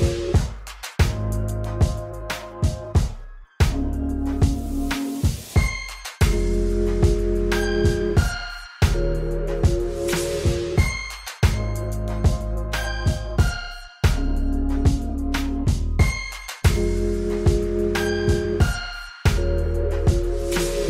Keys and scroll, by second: 0.8 r, 2.2 alt+z, 5.1 shift+d, 5.6 shift+d, 7.2 r, 7.7 r, 9.6 r, 11.4 r, 12.3 g, 13.1 r, 13.2 r, 14.7 KP_7, 14.8 KP_1, 15.1 KP_3, 16.3 shift+d.